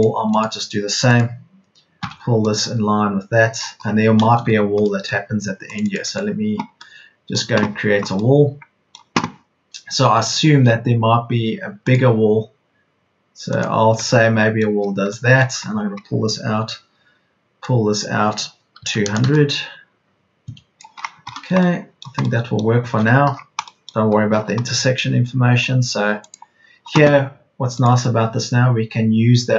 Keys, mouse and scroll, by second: 2.0 p, 3.8 Escape, 15.4 Escape, 16.5 p, 18.7 KP_2, 19.0 KP_0, 21.4 KP_0, 23.0 Escape.